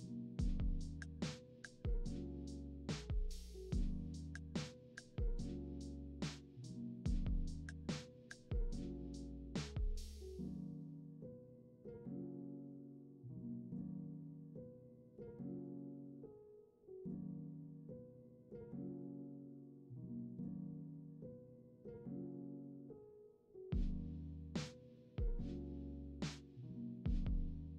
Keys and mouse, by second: 0.3-1.8 middle drag, 1.8 drag, 2.1 middle click, 2.2-5.6 drag, 3.6 `, 4.3 `, 5.6-6.7 middle drag, 8.0 r, 10.4-11.9 middle drag, 12.0-13.2 middle drag, 13.2-14.4 drag, 14.4 middle click, 14.5-16.2 drag, 16.2-17.6 middle drag, 18.2 ctrl+z, 18.9 ctrl+z, 19.2 ctrl+z, 19.6 ctrl+z, 24.6 middle click.